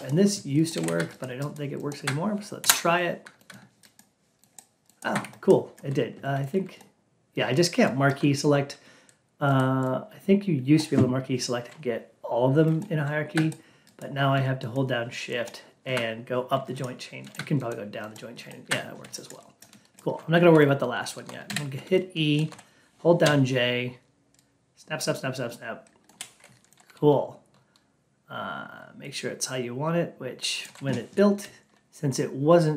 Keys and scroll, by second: 2.5 F8.